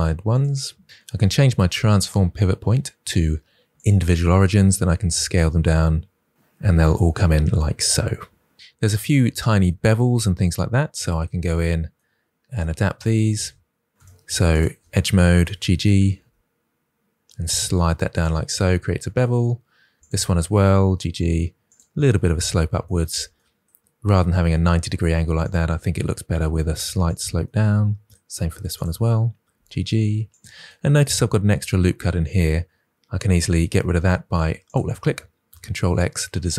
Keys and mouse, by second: 1.8-3.7 drag, 4.4 s, 13.9 2, 14.5 alt+click, 15.4 s, 15.5 s, 16.2 g, 18.1 click, 20.0 alt+click, 20.8 g, 21.0 g, 21.6 click, 26.2 g, 26.3 g, 27.0 click, 29.5 g, 29.6 g, 30.2 click, 35.6 ctrl+x.